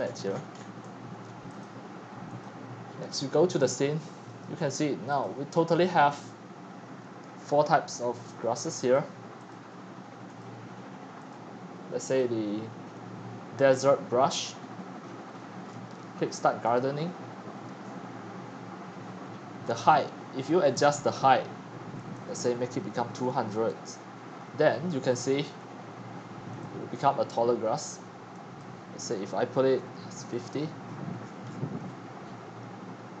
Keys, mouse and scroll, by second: 0.0-33.2 typing, 0.0 click, 0.0 middle click, 0.2-1.2 shift+scroll, 1.2 shift+scroll, 1.6 click, 5.2 click, 5.7 click, 6.1 click, 8.9 click, 10.4 click, 11.2 click, 12.0 click, 12.7 click, 14.5-16.8 middle drag, 14.5-15.1 scroll, 15.1 scroll up 1, 15.3 scroll, 15.4 scroll, 15.6 scroll, 15.6 scroll, 15.7 scroll, 15.9 scroll, 15.9 scroll, 16.0-16.4 scroll, 16.8-17.4 drag, 25.3-30.0 drag, 31.2-32.6 scroll down 20, 32.6 click, 32.9 scroll down 2.